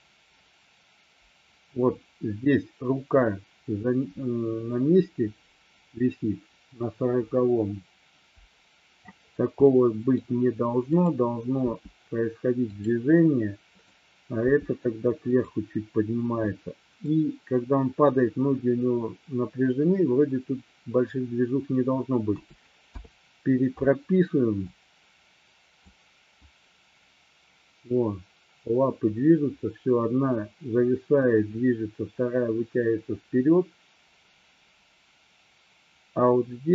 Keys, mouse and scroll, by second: 9.7 middle click, 11.0 click, 11.6 g, 12.7 click, 15.5 drag, 16.6-17.1 middle drag, 22.4 a, 23.0 i, 24.7-26.0 drag, 26.5-36.7 drag.